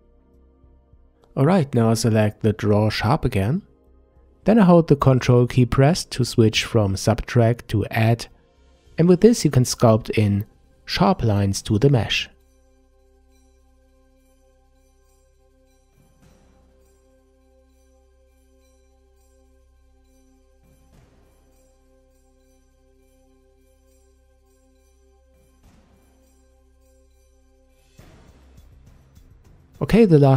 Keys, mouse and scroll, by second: 0.5-3.5 middle drag, 4.2 click, 4.8-7.4 middle drag, 7.4-10.5 ctrl+drag, 11.8-14.2 middle drag, 14.2-17.3 ctrl+drag, 18.9-21.9 middle drag, 22.5-25.6 ctrl+drag, 27.6-30.3 middle drag.